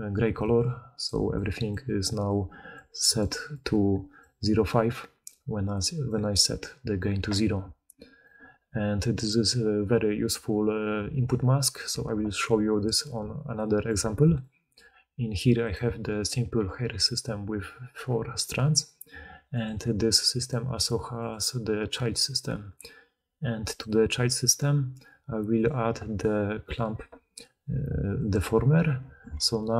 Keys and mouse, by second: 0.4-2.2 d, 2.7 d, 2.8-4.6 d, 7.2-13.1 drag, 7.2-13.1 middle drag, 7.2-13.1 right drag, 7.6-8.1 d, 10.2 d, 10.3 d, 13.1-20.4 shift+drag, 13.1-15.6 shift+middle drag, 13.1-15.6 shift+right drag, 16.2 g, 20.4-21.1 middle drag, 21.1 click, 21.2-22.1 middle drag, 22.1 click, 22.2-23.6 middle drag, 23.6 click, 23.7-25.6 middle drag, 25.6-29.7 drag.